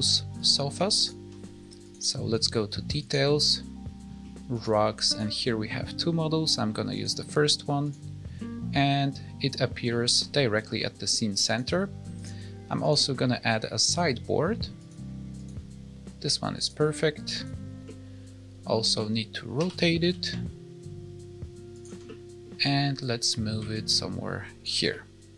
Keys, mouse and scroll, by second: 0.3 ctrl+click, 1.8 click, 2.2 click, 2.9 click, 5.0 click, 7.8 click, 8.3 middle click, 9.8 middle click, 11.4 click, 12.1 click, 12.7 click, 15.3 click, 17.3 click, 17.8 middle click, 19.5 r, 22.0 middle click, 23.2 click, 24.8 middle click.